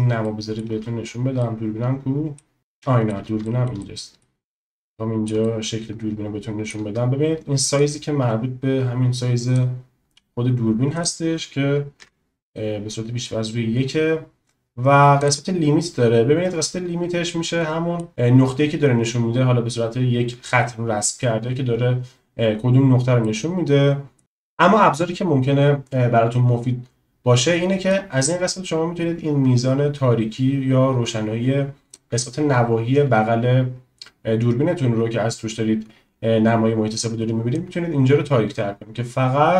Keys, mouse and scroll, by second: 0.3 shift+middle click, 1.5 middle click, 2.7-3.1 shift+middle drag, 3.6 shift+middle click, 3.9 middle click, 5.0 middle click, 5.5-6.7 shift+middle drag, 7.9-9.6 drag, 11.0-12.6 drag, 15.3 click, 16.6-18.1 middle drag, 23.3 middle click, 28.0-32.1 drag, 37.7-39.5 drag.